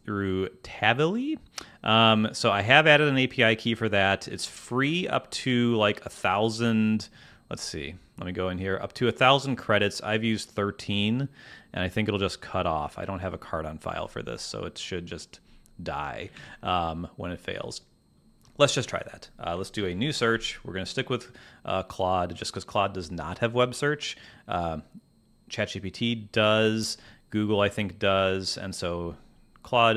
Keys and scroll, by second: 16.3 super+Tab, 19.7 super+n.